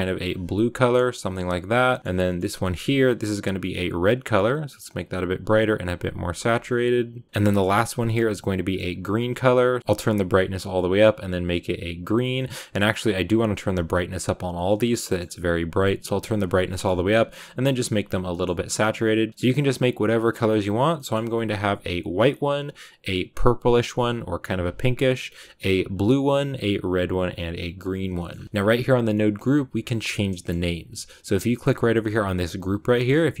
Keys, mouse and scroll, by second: 0.8 click, 1.6 click, 3.3-8.6 drag, 9.8-12.3 drag, 12.3-13.6 middle drag, 13.6-14.9 drag, 14.9-16.2 middle drag, 16.2 click, 16.7-19.3 middle drag, 19.3-33.4 drag.